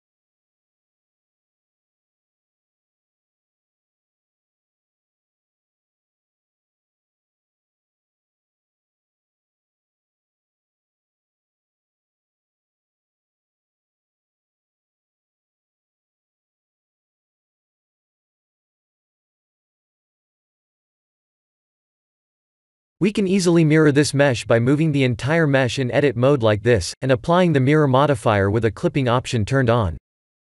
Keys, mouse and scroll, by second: 3.0 click, 4.9 middle click, 5.5 middle click, 5.7 middle click, 6.7 3, 6.9 click, 8.3 KP_3, 8.8 KP_1, 9.6 KP_3, 10.5 e, 12.3 r, 13.3 g, 14.7 s, 16.4 g, 18.3 r, 21.9 Tab, 23.3 Tab, 23.7 a, 24.1 g, 30.3 g.